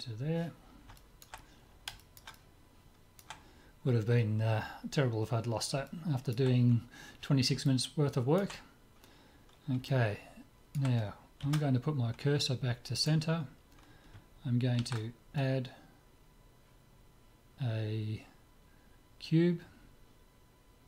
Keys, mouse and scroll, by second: 0.0-1.6 drag, 1.0-4.2 middle drag, 5.9-9.6 middle drag, 9.9-12.1 middle drag, 11.4 shift+s, 14.8 shift+a.